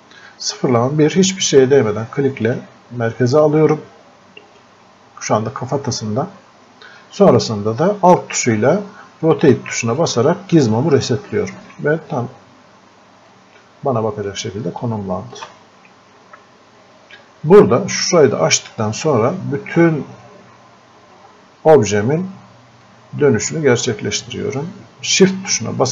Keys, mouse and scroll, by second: 2.5 click, 8.0 click, 13.3-19.2 drag, 19.2 scroll up 1, 22.9-25.9 drag.